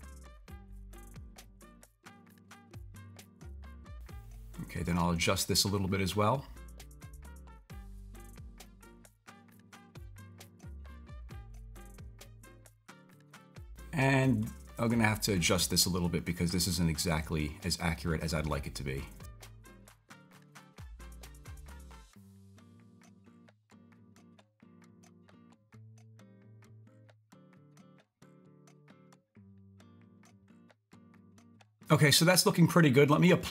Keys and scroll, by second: 23.5 super+z.